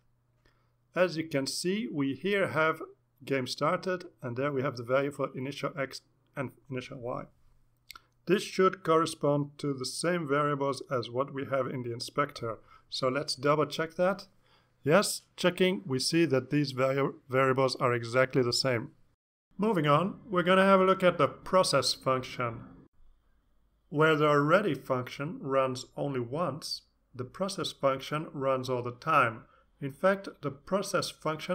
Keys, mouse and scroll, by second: 0.8-2.0 drag, 9.8 click, 12.3 click, 21.1-21.7 scroll down 4, 22.4-31.5 drag.